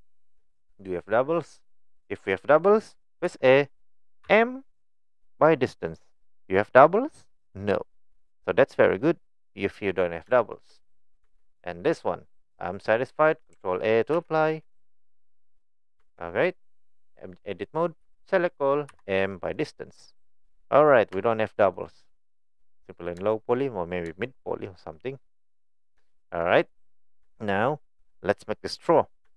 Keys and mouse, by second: 0.4 middle click, 2.0 middle click, 4.3 m, 8.2 click, 8.7 middle click, 10.3 shift+middle click, 11.2 Tab, 11.5 click, 12.6 click, 14.2 ctrl+a, 16.0 Tab, 18.1 a, 18.9 m, 20.8 middle click, 21.2 Tab, 21.4 middle drag, 21.7 click, 22.1-23.1 middle drag, 23.3 shift+middle drag, 24.3-24.6 shift+middle drag, 24.9-25.8 middle drag, 26.2 shift+middle click, 26.8 middle click, 27.3 shift+middle click.